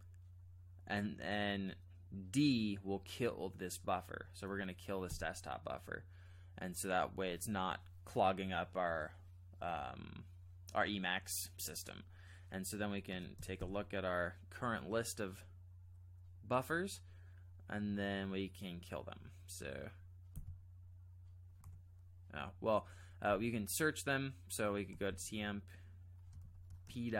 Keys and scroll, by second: 5.1 d, 13.1 space, 13.6 b, 20.3 d, 24.7-25.6 typing, 26.4 ctrl+n, 26.8 Return.